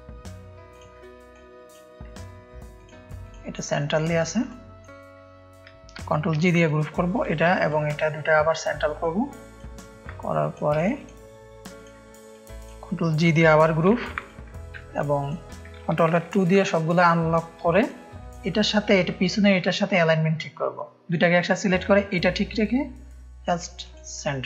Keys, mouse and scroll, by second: 2.7-4.8 drag, 6.3 ctrl+g, 6.5 click, 7.1 click, 8.9-10.5 drag, 10.7-11.1 shift+drag, 11.7 click, 13.9 ctrl+g, 14.1 ctrl+click, 14.7 ctrl+space, 14.7 ctrl+click, 16.3 ctrl+alt+2, 17.7-19.1 drag, 17.7 space, 23.8-24.4 drag.